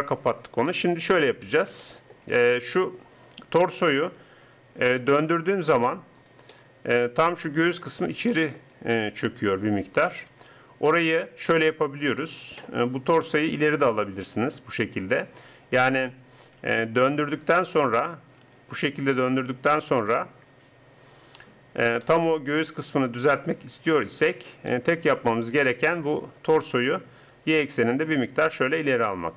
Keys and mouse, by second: 4.0 r, 6.5 middle click, 7.3 middle click, 7.4 middle click, 10.3 KP_3, 13.0 g, 16.4 alt+r, 18.4 r, 21.8 click, 27.3-28.6 drag.